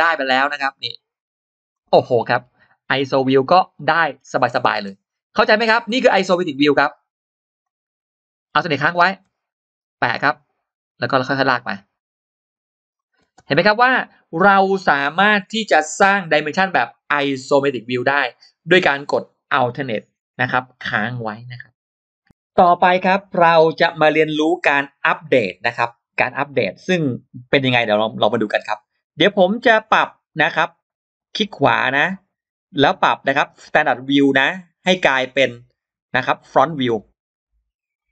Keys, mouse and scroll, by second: 1.6 alt+click, 1.9-2.3 scroll down 2, 2.9-3.2 scroll up 2, 4.1-4.4 scroll down 2, 4.6-5.2 scroll up 2, 6.4 click, 7.5 click, 13.3 space, 13.3 scroll down 1, 14.1-14.4 scroll up 1, 30.2 click, 31.1 right click.